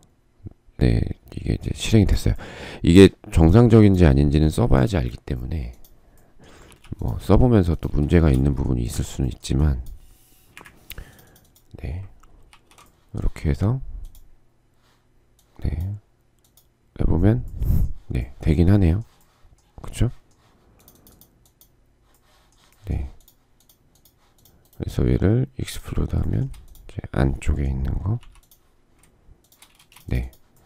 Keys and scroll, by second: 6.2 p, 8.5 shift+space, 10.1 Delete, 27.8 m, 29.3 shift+space.